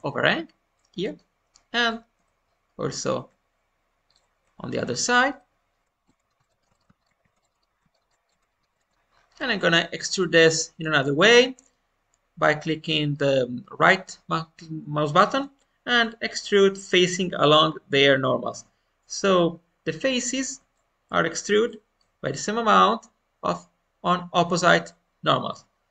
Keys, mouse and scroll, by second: 0.7-1.7 middle drag, 1.7 click, 2.1 Tab, 2.9-4.3 drag, 4.4-4.8 scroll down 1, 4.8 middle click, 5.4-5.8 scroll up 1, 6.0 shift+click, 6.1 middle click, 6.3 scroll down 1, 6.4 shift+middle click, 7.0 ctrl+click, 7.2 ctrl+z, 7.4 shift+click, 7.5 shift+middle click, 7.9 ctrl+click, 8.4 middle click, 9.0-9.3 scroll up 1, 9.5-12.1 shift+middle drag, 15.2-19.4 right drag, 19.4-19.8 scroll down 1, 19.8-22.4 middle drag, 24.5-25.9 middle drag.